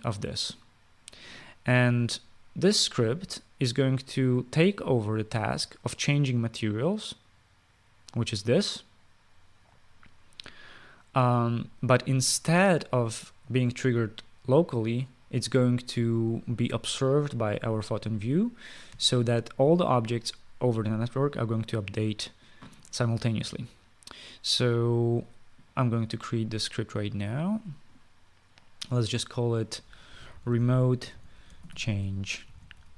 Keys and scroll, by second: 30.6-32.9 typing.